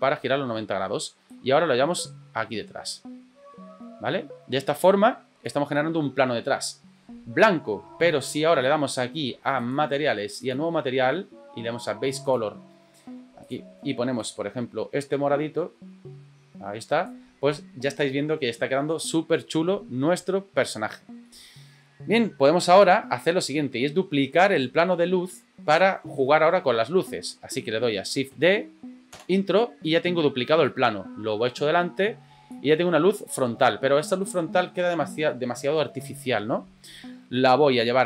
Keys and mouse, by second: 1.4-5.4 drag, 10.4 click, 12.2 click, 13.4 click, 21.2-21.8 middle drag, 24.5 right click, 28.3 shift+d, 30.6-32.5 drag, 37.3-38.0 middle drag.